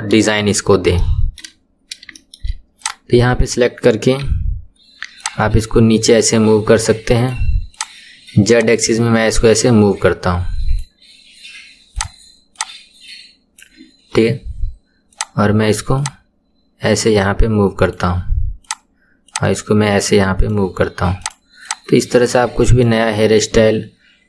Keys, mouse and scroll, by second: 1.0 shift+middle click, 1.6-2.1 scroll up 2, 2.1 shift+middle click, 2.8 click, 4.2 KP_1, 5.2 click, 7.7 click, 8.5 click, 11.9 click, 12.6 click, 15.1 click, 15.9 click, 18.6 click, 19.2 drag, 21.2 click, 21.6 click.